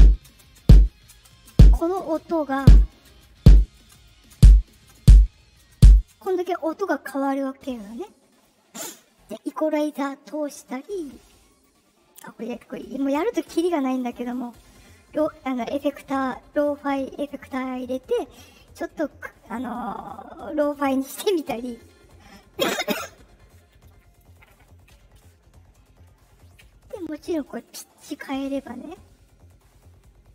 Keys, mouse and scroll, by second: 0.0-6.0 typing, 3.9 click, 11.4 click, 13.6 click, 26.8 click, 27.4 click, 27.6 click, 28.8 click.